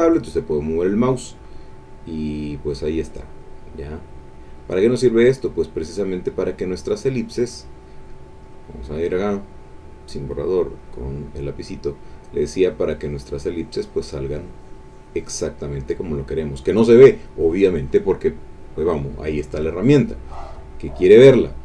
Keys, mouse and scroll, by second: 6.1 click, 8.4 click, 10.8 click, 12.3-15.6 drag, 20.8 click.